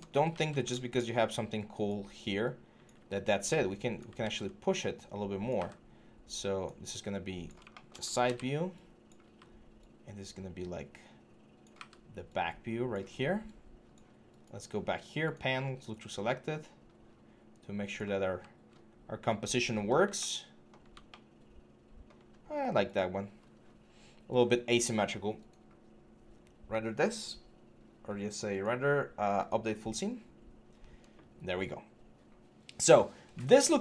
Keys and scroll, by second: 0.1 ctrl+d, 3.1 e, 4.0 ctrl+z, 5.3 w, 7.0 w, 8.0 ctrl+d, 9.0 e, 11.5 w.